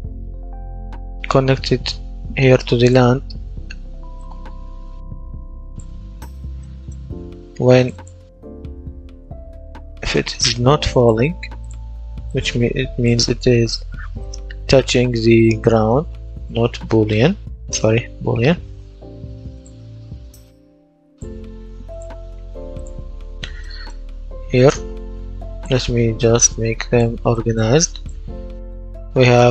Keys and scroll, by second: 14.4-19.1 typing.